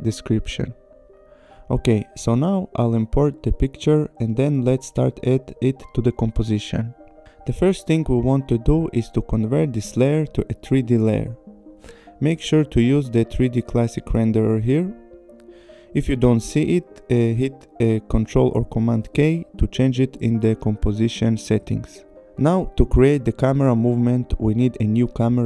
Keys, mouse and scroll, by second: 0.4 click, 1.5 click, 4.0 click, 10.3 click, 11.6 click, 13.2 click, 14.6 click, 16.9 ctrl+k, 18.1 click, 18.9 click, 23.9 right click.